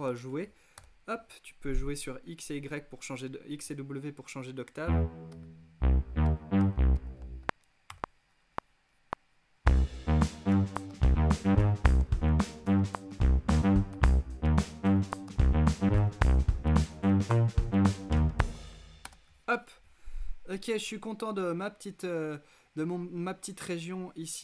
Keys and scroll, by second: 0.0-0.3 typing, 4.8-7.6 typing, 9.6-18.7 typing.